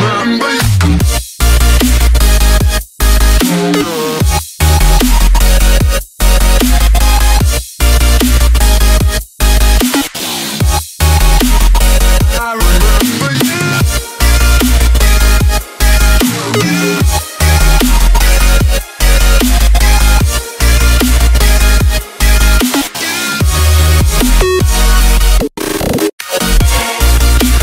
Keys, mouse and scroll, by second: 0.2 click, 2.3-2.7 typing, 5.7-6.6 typing, 6.9 click, 9.3 Delete, 9.4 Delete, 9.6 Delete, 9.7 Delete, 10.1-11.1 typing, 11.5 click, 15.1-16.2 typing, 16.8 click, 17.8 F10, 18.3 click, 19.7 Delete, 19.8 typing, 20.0 right click, 20.9-22.6 typing, 25.8 F11, 25.8 F10, 26.2-27.6 typing.